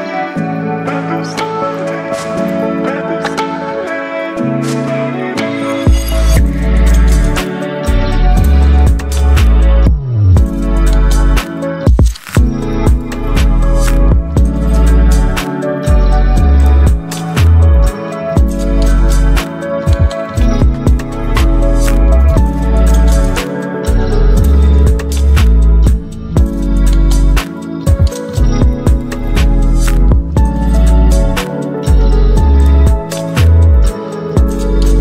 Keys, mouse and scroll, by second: 8.8 ctrl+t, 11.5-16.5 drag, 16.5-20.9 shift+drag, 26.1 right click, 26.9 click, 30.8 click.